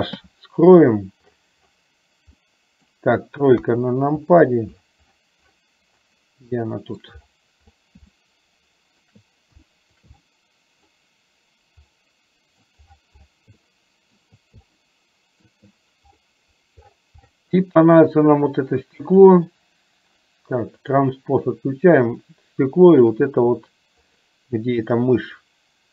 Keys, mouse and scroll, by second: 0.3 h, 2.5-2.9 middle drag, 3.6 KP_3, 6.6-7.1 shift+middle drag, 8.3-9.0 shift+middle drag, 9.8 shift+middle drag, 10.4 middle click, 12.0-12.8 middle drag, 13.6 shift+middle click, 14.8 shift+middle click, 19.0 click, 20.9 click, 22.9 shift+click, 25.3 click.